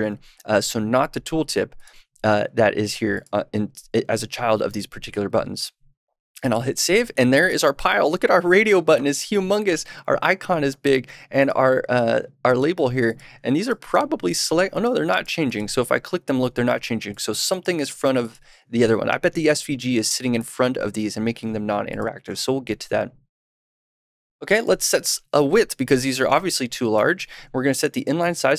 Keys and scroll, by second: 4.6 super+s, 26.9 super+/.